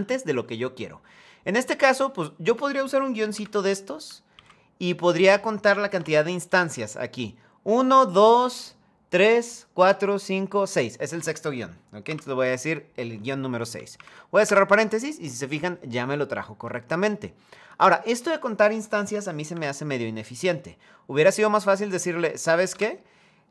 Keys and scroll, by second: 14.1 Return, 19.2 F2, 22.4 BackSpace.